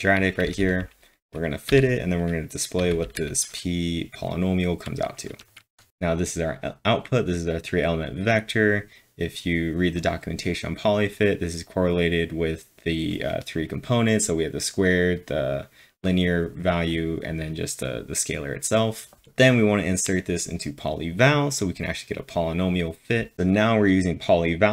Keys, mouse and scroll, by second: 0.0-1.7 typing, 2.8 k, 5.6 ctrl+`, 5.6 typing, 23.3 F5, 23.3 scroll down 1, 23.3 typing.